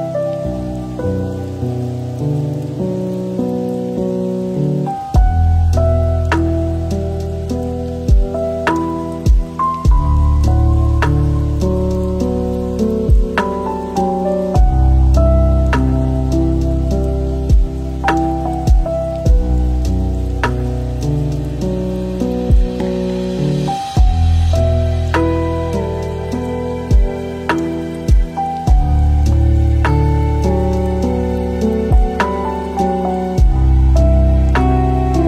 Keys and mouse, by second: 1.0 ctrl+l, 2.9 click, 12.5 middle click, 14.0 middle click, 14.7 middle click, 15.5-16.7 middle drag, 17.3 click, 18.0-18.7 drag, 20.2 click, 21.1 middle click, 21.7 ctrl+shift+click, 22.2 middle click, 22.8 middle drag, 23.2 shift+middle drag, 24.4 middle click, 25.9-26.2 drag, 31.5 middle click.